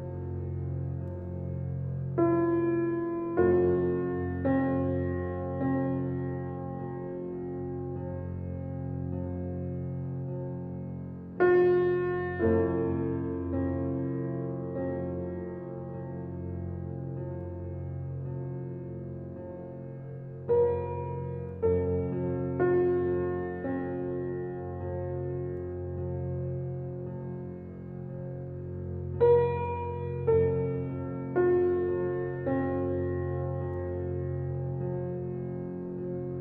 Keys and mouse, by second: 1.2-2.3 drag, 4.1 shift+click, 4.5 s, 7.1-8.4 drag, 8.8 s, 10.6 Tab, 10.6 click, 11.3 click, 12.2 click, 12.6 right click, 13.0-13.4 drag, 14.1-14.8 drag, 15.7 click, 16.2 click, 16.9-19.4 drag, 20.8-21.2 drag, 22.0 Tab, 22.8 ctrl+x, 22.8 g, 25.3 Tab, 25.4 click, 26.2-29.0 drag, 30.8-33.0 drag, 34.0 click, 35.9 click.